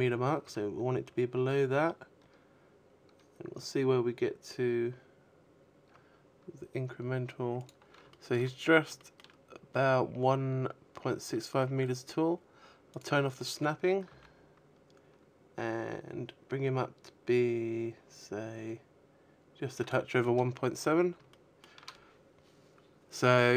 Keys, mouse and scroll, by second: 5.0 click, 5.4 shift+middle click, 5.8-7.3 scroll up 6, 6.3 shift+middle click, 10.2 click, 11.4 s, 17.2 click, 17.4 a, 17.7-18.6 scroll down 10, 18.6 shift+middle click, 21.2 shift+middle click, 21.2-21.9 scroll up 3, 21.9 right click, 22.4 Tab, 22.9-23.5 scroll up 3.